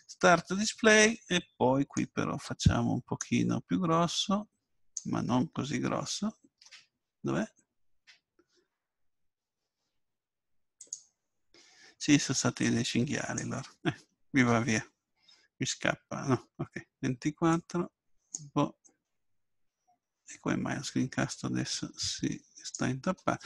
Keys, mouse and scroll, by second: 2.0-15.1 drag, 17.8-20.1 drag, 21.7-23.4 drag.